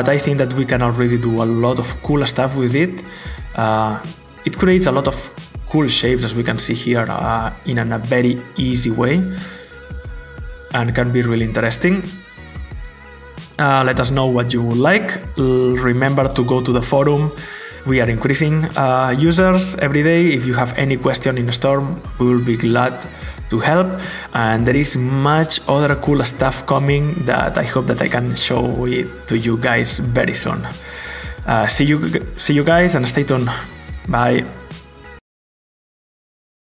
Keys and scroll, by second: 34.5 alt+Tab.